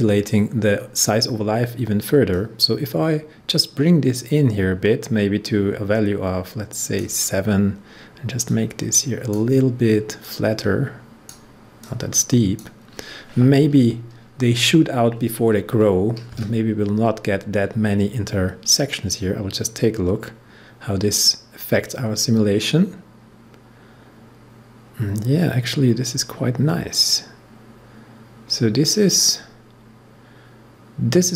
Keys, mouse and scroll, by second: 2.2-15.0 drag.